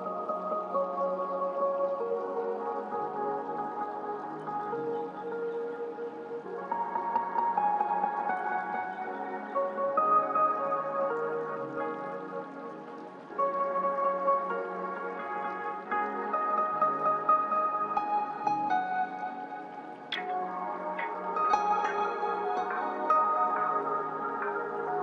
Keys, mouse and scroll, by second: 17.4-25.0 drag.